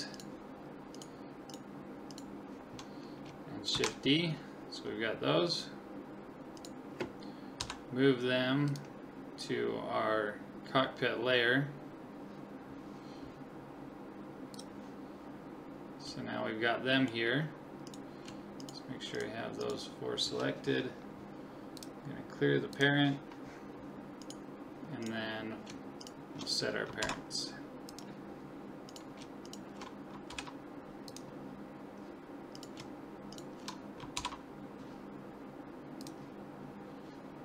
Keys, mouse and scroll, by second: 3.7 shift+d, 7.6 m, 14.6 click, 15.4 middle click, 16.3-17.9 middle drag, 17.9-21.5 right drag, 21.8 click, 24.2-27.8 right drag, 27.0 ctrl+p, 28.9-31.2 right drag, 30.3 ctrl+p, 32.6-35.3 right drag, 34.2 ctrl+p.